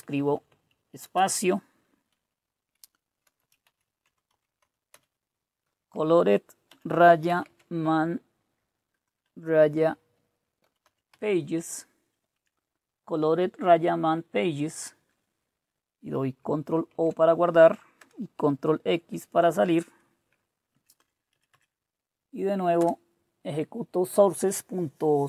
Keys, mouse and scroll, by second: 0.2 Down, 0.7-1.5 typing, 3.0-4.5 typing, 4.6 Right, 6.7-11.6 typing, 14.1 Right, 16.9 ctrl+o, 18.0 Return, 18.8 ctrl+x, 20.7 Up, 20.9 Up, 21.3 Up, 21.5 Up, 22.7 BackSpace.